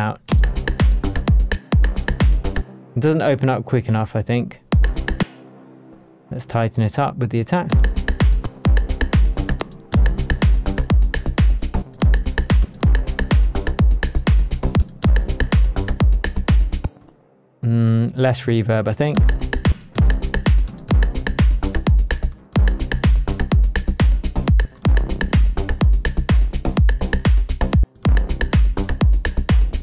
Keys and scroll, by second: 0.2 shift+space, 0.9 space, 1.5 space, 4.6 space, 15.8 space, 16.8 space, 19.1 space, 22.2 space.